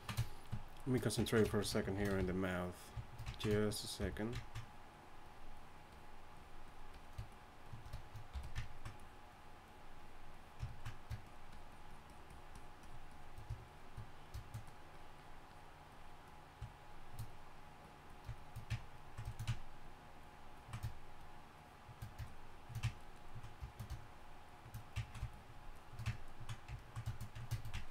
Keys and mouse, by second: 2.0 shift+c, 2.2 f, 4.0 f, 8.3 f, 8.7-10.9 drag, 19.4-22.9 drag, 23.0-27.6 drag.